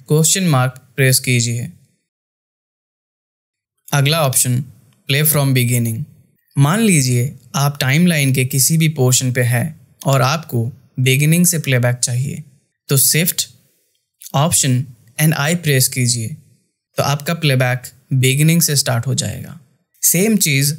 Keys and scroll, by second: 14.4 shift+i.